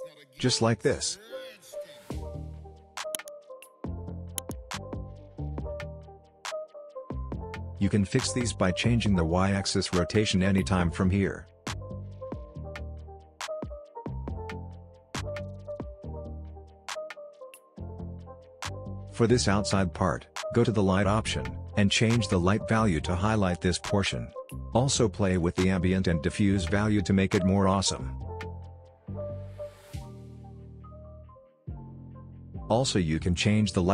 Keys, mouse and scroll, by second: 4.3-5.6 drag, 6.3-7.3 scroll up 1, 7.3 click, 9.0-12.7 drag, 10.6-12.7 drag, 12.9 scroll down 1, 13.1-13.4 scroll up 1, 13.4 scroll down 1, 13.6 click, 14.6 space, 15.0 click, 18.8-23.0 drag, 30.2-30.6 scroll up 1, 30.6-32.4 scroll down 1, 32.4-33.9 drag.